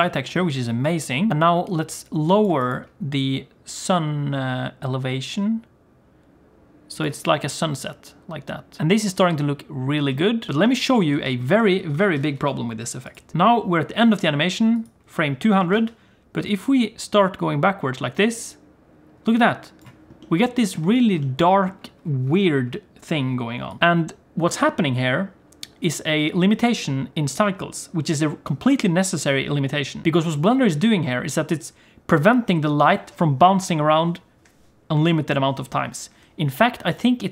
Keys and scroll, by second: 12.0 alt+a, 12.4 ctrl+s, 15.7 alt+a.